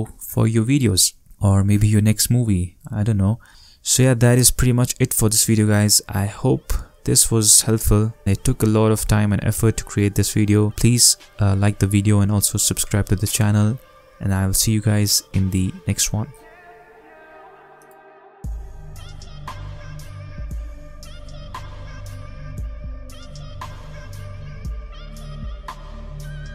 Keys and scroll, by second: 3.5 space.